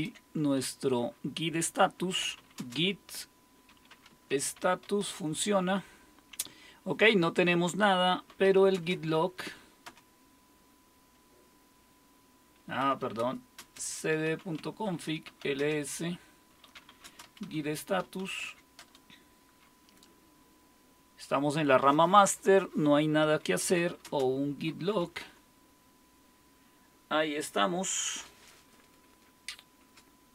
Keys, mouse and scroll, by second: 1.9-5.3 typing, 8.1-9.9 typing, 12.6-18.8 typing, 14.9 Return, 23.4-25.5 typing, 29.8 space.